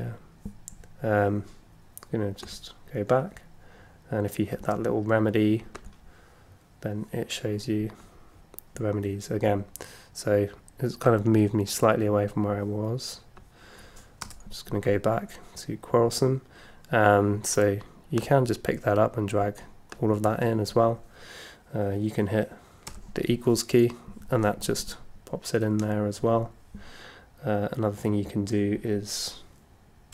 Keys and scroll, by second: 14.2 Return, 14.8 Return, 22.9 =.